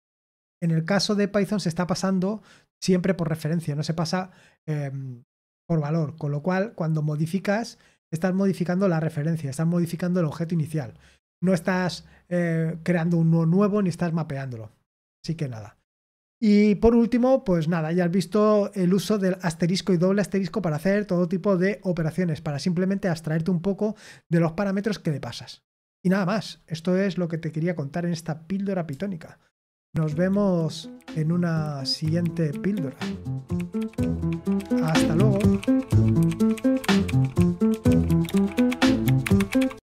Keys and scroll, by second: 2.7-3.2 scroll up 1, 21.6-29.8 scroll down 1, 29.8 super+x.